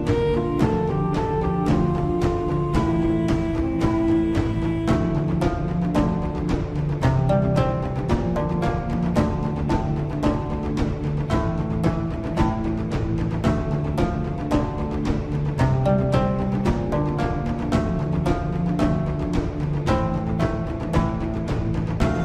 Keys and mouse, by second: 3.5-4.7 drag, 5.3 shift+click, 9.6 ctrl+KP_Add, 11.7 g, 16.4-17.5 drag, 18.1 alt+click, 19.0 alt+click, 20.9 g.